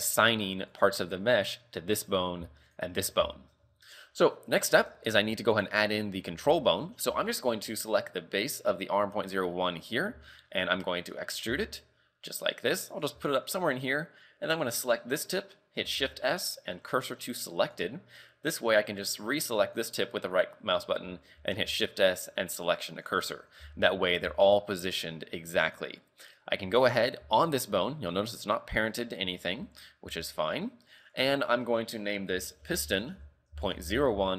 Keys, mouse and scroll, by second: 0.6 right click, 2.7 shift+right click, 3.0 scroll down 4, 3.4 shift+middle click, 3.7-4.2 scroll up 4, 5.6 right click, 6.6 shift+middle click, 7.2 scroll down 4, 9.5-10.3 scroll up 3, 10.3 shift+middle click, 11.5 e, 13.4 shift+middle click, 13.6-14.7 scroll up 3, 14.7 right click, 15.2 scroll down 4, 16.0 shift+s, 19.6 right click, 21.7 shift+s, 23.6 z, 24.3 z, 25.6 right click, 27.2 g, 29.4 shift+middle click, 29.9-30.5 scroll down 4, 30.3 shift+middle click, 30.5 scroll up 3, 31.2 click.